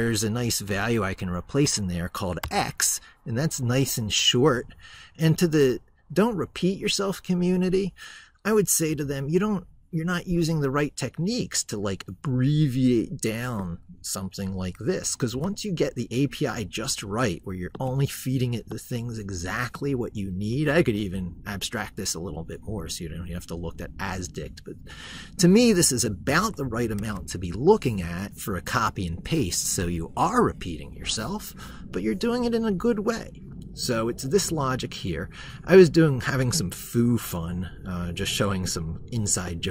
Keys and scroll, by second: 2.2 ctrl+c, 26.8 ctrl+c.